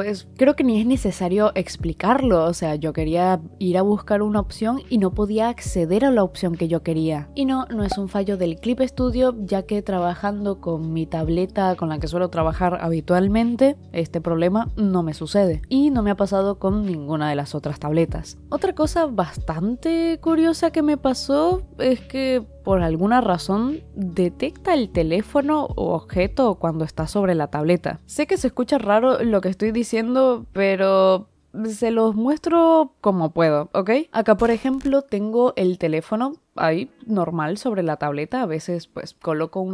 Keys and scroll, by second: 1.0 i, 2.1 i, 3.1 i, 3.3 i, 3.8 i, 11.6-17.3 typing, 13.2 ctrl+z, 15.6 ctrl+z, 15.8 ctrl+z, 19.1 i, 20.8-24.7 typing, 25.8 i, 26.3 ctrl+z, 26.7 ctrl+z, 27.8 ctrl+z, 28.1 ctrl+z, 28.6 c, 28.8 ctrl+z, 29.0 ctrl+z, 29.1 ctrl+z, 30.3 space, 30.6 space, 32.6 i, 33.5 space, 33.6 space, 33.8 space.